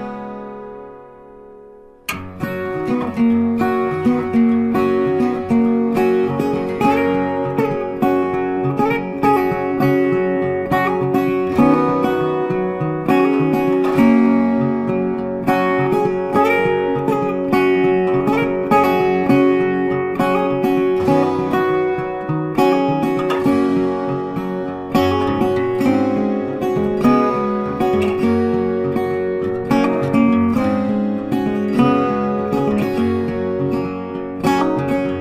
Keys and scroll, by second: 27.8 Right, 32.6 ctrl+t.